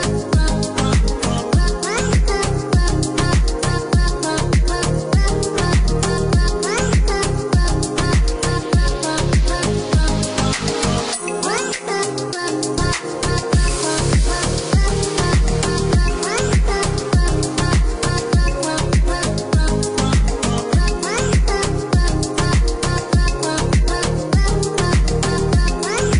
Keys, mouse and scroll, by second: 2.7 click, 4.3 click, 7.8 KP_0, 8.4 KP_4, 8.9 KP_Enter, 10.7 click, 14.8 click, 16.5 click, 17.8 click, 18.7 KP_1, 19.0 KP_Decimal, 19.2 KP_3, 19.9 KP_Enter, 21.1 click, 25.7 click.